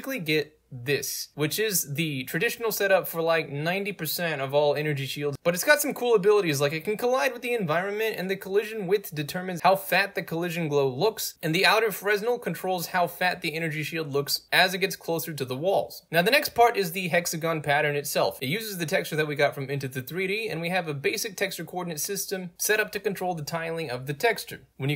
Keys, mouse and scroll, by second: 0.8 click, 1.9 alt+click, 3.5 ctrl+z, 4.1-8.9 drag, 9.0-11.4 drag, 11.4 Return, 11.7-15.1 drag, 16.0 scroll up 2, 16.0 middle click, 17.6 click, 19.7 click, 20.5 click, 21.4 click, 22.1 click, 22.5 click, 22.9 click, 23.9 click, 24.4 click, 24.8 right drag.